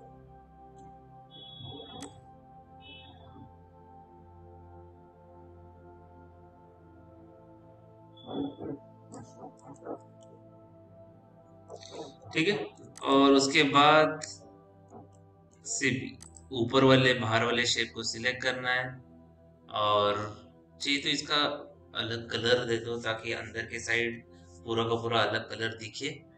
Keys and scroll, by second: 10.4 p.